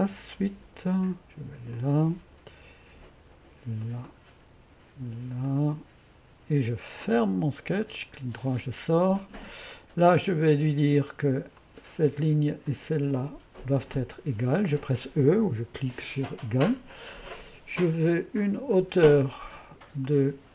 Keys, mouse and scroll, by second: 0.3-1.9 drag, 3.8 click, 5.4 click, 7.1 click, 7.8-11.6 middle drag, 11.6-13.9 drag, 13.9 e, 18.7-20.5 drag.